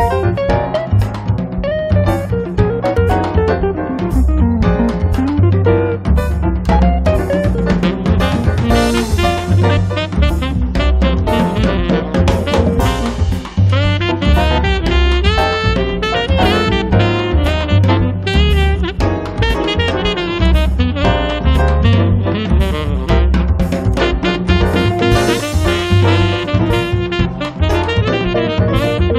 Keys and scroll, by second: 2.3 r, 5.9 p, 8.6 space, 12.3 f, 13.6 5, 13.8 Return, 14.6 p, 16.7 space, 20.7 r, 28.2 space.